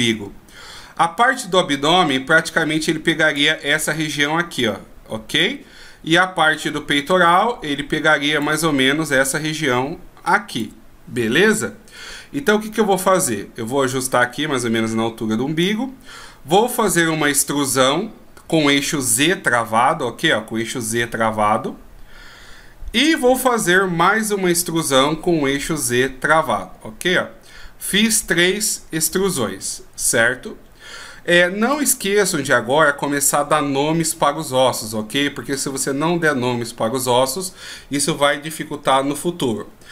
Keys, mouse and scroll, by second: 1.3 d, 1.5 click, 3.5-3.9 d, 4.1 click, 5.6 d, 5.7 d, 6.2-7.1 d, 7.1 click, 8.6 d, 8.8-9.4 d, 9.4 click, 10.8 d, 12.6 d, 14.4 click, 17.4 e, 24.7 e, 31.8 right click.